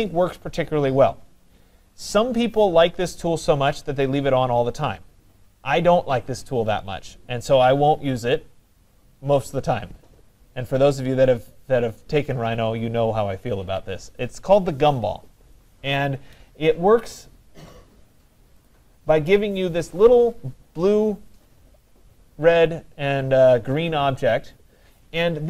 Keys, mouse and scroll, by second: 18.7-23.8 drag.